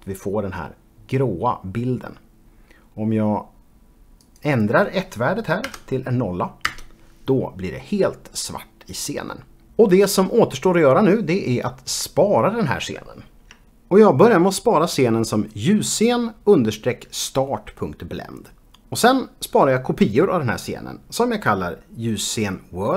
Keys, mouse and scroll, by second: 4.3 click, 5.7 KP_0, 6.8 Return.